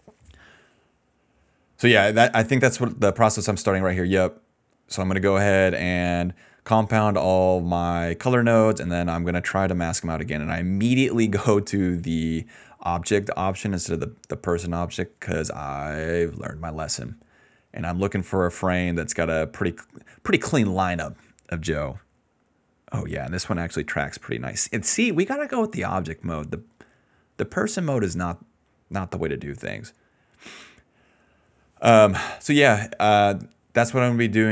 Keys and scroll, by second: 0.5 a.